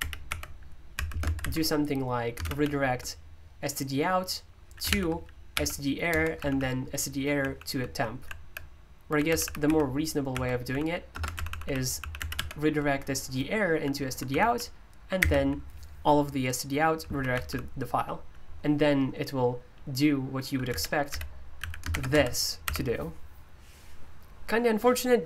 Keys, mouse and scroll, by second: 0.0-2.6 typing, 4.6-12.8 typing, 14.3-15.2 typing, 17.3 typing, 20.7-22.6 typing.